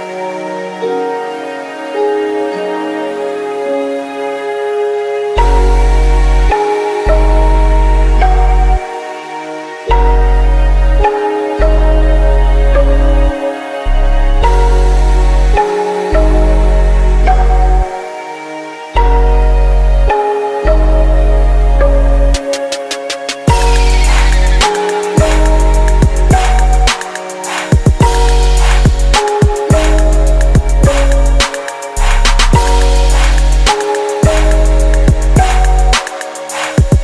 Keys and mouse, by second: 0.8 shift+d, 5.3 g, 9.6-11.3 drag, 17.3 g, 21.3 m, 24.2-26.8 drag, 26.8 right click, 27.6-30.7 middle drag, 32.6-34.2 right drag, 34.6-35.6 drag, 35.9 click, 35.9-37.0 middle drag.